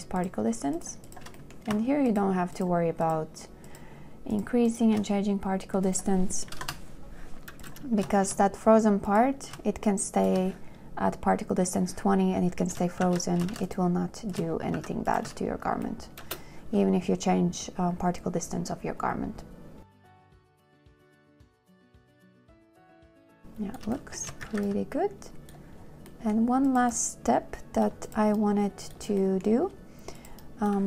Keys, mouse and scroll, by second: 0.1 shift+click, 0.5 shift+click, 1.1 shift+click, 1.4 shift+click, 3.9 click, 4.6 shift+click, 5.0 shift+click, 6.8 typing, 6.9 Return, 8.4 shift+w, 10.4 shift+click, 13.3 shift+w, 13.8 shift+w, 14.9 shift+click, 15.1 shift+q, 15.4 click, 16.6 space, 19.5 click, 19.6 space, 22.9 2, 24.7 shift+a.